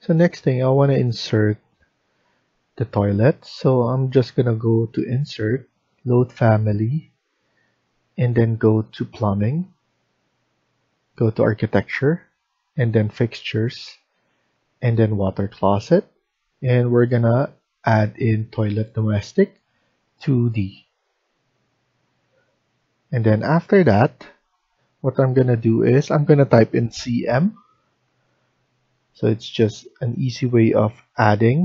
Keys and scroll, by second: 26.5-27.0 typing.